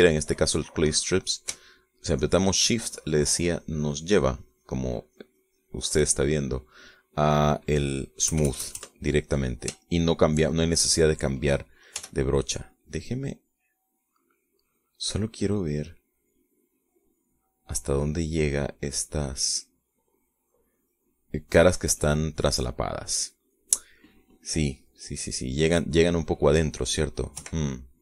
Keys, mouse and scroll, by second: 1.4-3.5 middle drag, 3.5-7.4 shift+drag, 7.4-8.6 shift+middle drag, 9.5 KP_Add, 10.5-11.7 middle drag, 11.8 shift+middle click, 13.3 g, 13.8-14.9 drag, 15.3 click, 16.6 click, 18.0 click, 19.6-20.8 drag, 21.6 click, 22.7 click, 23.9 click, 25.1-27.9 middle drag.